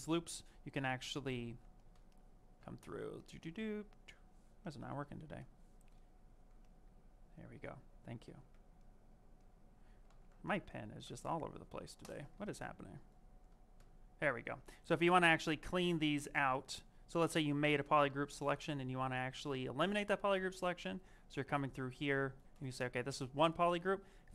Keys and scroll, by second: 8.2 z, 10.0 z, 12.3 z.